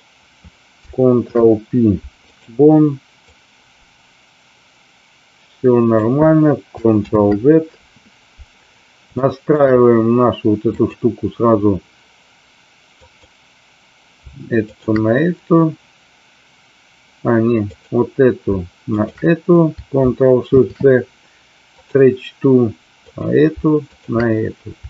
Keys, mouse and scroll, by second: 1.1 ctrl+p, 3.1-5.9 drag, 7.1 ctrl+z, 9.2 shift+middle click, 10.6 click, 12.9 click, 14.6 shift+click, 18.9 shift+click, 20.4 ctrl+shift+c, 23.0-23.5 drag.